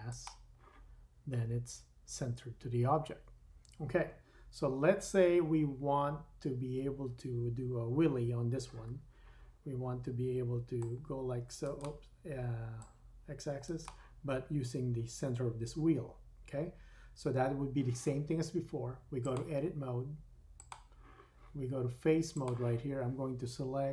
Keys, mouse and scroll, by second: 8.0 KP_3, 11.8 middle click, 12.7-13.9 drag, 13.9-19.2 middle drag, 19.2-23.9 drag.